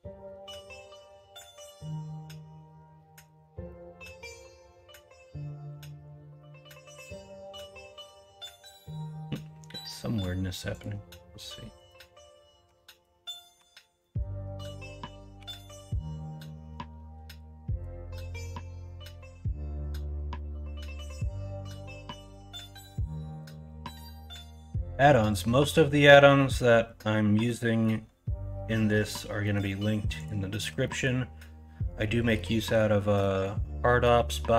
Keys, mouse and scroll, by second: 0.5 ctrl+KP_Subtract, 1.8-2.8 middle drag, 3.4 middle click, 4.1 middle drag, 4.6-9.2 middle drag, 12.6 Tab, 13.4 middle click, 13.6 Tab, 14.0 middle click, 15.3 2, 18.2 middle click, 18.2 scroll up 1, 18.5-18.8 scroll down 1, 20.3-21.0 scroll up 1, 21.0 scroll down 1, 21.4 middle click, 22.3 middle click, 22.6 Tab, 23.6-24.9 middle drag, 25.2-26.1 middle drag, 26.3 middle drag, 27.5 middle click, 29.4 middle click, 30.9 middle click, 32.3 middle drag, 33.1 middle drag, 34.1 middle drag.